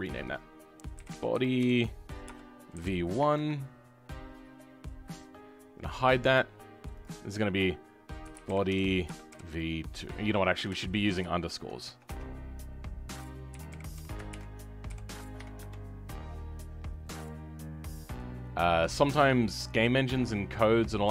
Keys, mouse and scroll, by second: 7.0 click, 18.0-21.1 drag.